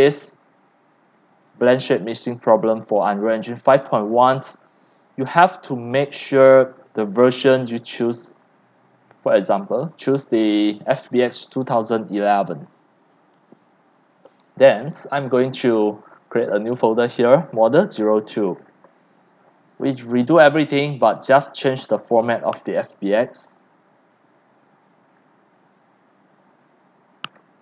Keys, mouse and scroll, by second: 4.2 click, 9.2-12.3 drag, 12.7-17.7 drag, 17.4-18.9 typing, 20.4-24.1 drag, 25.4 click, 25.6 ctrl+c, 26.8 click.